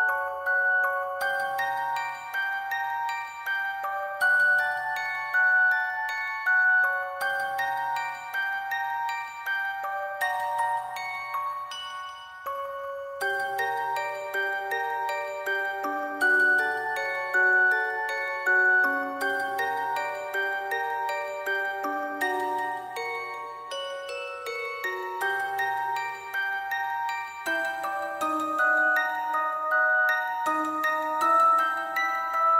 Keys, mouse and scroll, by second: 0.4 shift+click, 0.6 alt+click, 1.4-2.6 typing, 3.8 alt+click, 5.1 alt+click, 8.8 alt+click, 9.0 alt+click, 9.1 shift+click, 9.9 alt+click, 10.0 alt+click, 10.1 alt+click, 10.8 alt+shift+click, 12.2 ctrl+click, 13.2-14.1 typing, 14.2 double click, 15.0 double click, 15.5 alt+click, 16.4 alt+click, 16.8 shift+click, 18.1 ctrl+click, 18.3 shift+click, 20.3 double click, 21.0 ctrl+click, 21.6 typing, 23.4 alt+click, 24.6 ctrl+click, 25.8 ctrl+click, 26.5 ], 28.9 ctrl+click, 29.7 shift+click, 30.2 alt+click, 30.6 alt+click, 31.1 shift+click.